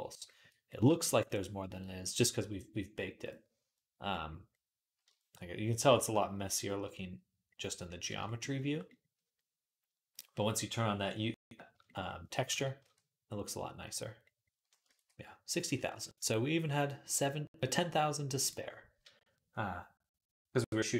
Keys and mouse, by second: 3.0 click, 9.9 click, 12.4 ctrl+s, 12.6 q, 14.7 ctrl+s, 16.0-20.9 drag, 16.4-20.9 middle drag.